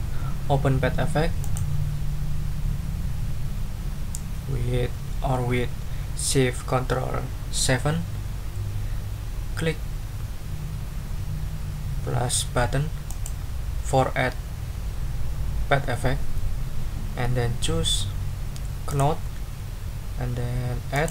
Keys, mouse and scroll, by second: 1.4 click, 13.1 click, 17.8 scroll down 2, 18.9 click, 20.9 click.